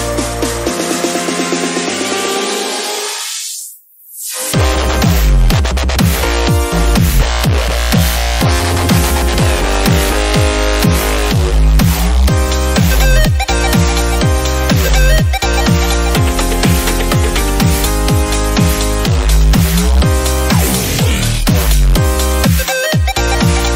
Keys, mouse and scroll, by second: 0.4 click, 0.8 scroll down 2, 0.8-1.2 shift+middle drag, 1.2-1.6 scroll up 2, 1.6 s, 2.6 shift+d, 3.5 s, 4.4 g, 5.0-5.5 right drag, 5.5 click, 5.6-6.4 right drag, 6.4 shift+d, 7.6 click, 7.7 scroll down 1, 8.3 s, 8.7 middle click, 8.8-9.2 scroll up 3, 9.5 KP_7, 9.8 g, 10.3 s, 10.8 middle click, 11.1 scroll up 3, 11.3 click, 11.8-12.2 scroll down 2, 12.2 KP_7, 12.4 scroll up 4, 12.7 shift+middle drag, 12.9 drag, 13.2 shift+drag, 13.5-13.8 shift+drag, 13.8 shift+d, 14.3-14.8 scroll down 2, 14.8 g, 15.2 s, 15.9 g, 17.2-17.9 scroll down 1, 17.9 scroll down 1, 18.0 shift+d, 18.7-19.1 scroll up 4, 19.1 shift+middle click, 19.4-19.8 drag, 19.8 shift+middle drag, 20.1 drag, 20.3 s, 20.9 g, 21.5 click, 21.6 click, 21.8 middle click, 21.9 scroll down 4, 22.1 middle click, 22.8 click, 23.3 scroll down 3, 23.6 middle drag.